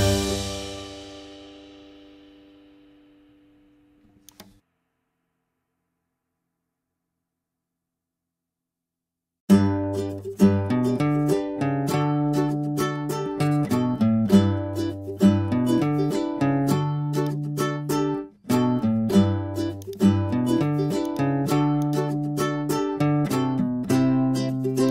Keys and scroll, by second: 23.0 super+t.